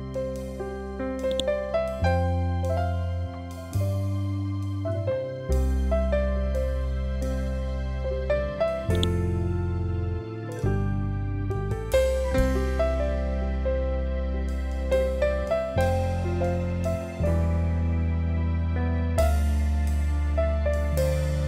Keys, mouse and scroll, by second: 1.2 click, 1.6-2.3 scroll up 1, 8.8 click, 10.4 shift+m, 11.9-17.0 typing, 18.1-21.4 typing.